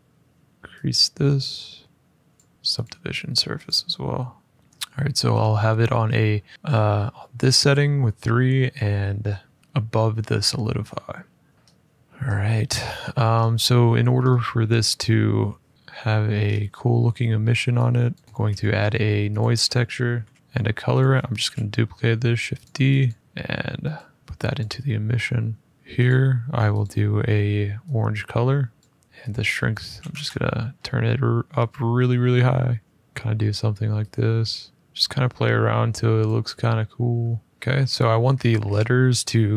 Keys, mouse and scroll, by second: 2.1 click, 2.5 click, 3.4 click, 4.5 middle click, 4.9 middle click, 5.1 scroll up 2, 6.2 middle click, 11.4 click, 11.5-12.2 scroll, 12.8-13.7 scroll, 13.7-14.1 scroll, 16.2-16.7 scroll, 17.9 click, 18.2 click, 18.3 a, 19.1 click, 19.8-21.0 typing, 20.3 click, 20.7 click, 22.4 click, 22.8 click, 23.2 click, 23.7 click, 24.3 click, 25.7 shift+middle click, 25.8 click, 26.5 click, 28.5 click, 29.0 shift+middle click, 29.6 typing, 31.2 middle click, 32.9 click, 36.0 click, 36.7-37.1 scroll up 1, 37.4 scroll up 1, 37.5 scroll down 2, 38.1 scroll down 1, 38.1-38.4 scroll down 2, 38.4 scroll up 1, 38.5-38.8 scroll down 3.